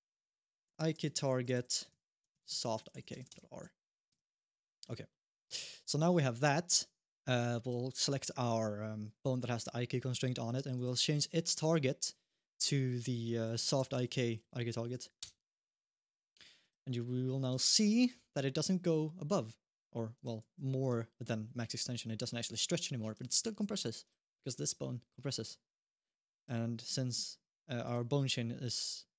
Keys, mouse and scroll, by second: 3.9 Tab, 4.2 middle click, 4.9 shift+middle click, 5.2-7.4 scroll down 1, 7.4 click, 10.5 click, 11.4 click, 14.3 Down, 16.4 click, 17.3 g, 20.2 g, 21.6 g, 23.1 alt+g, 25.0 middle click, 25.3 g, 27.6 click, 28.7-29.1 scroll up 1.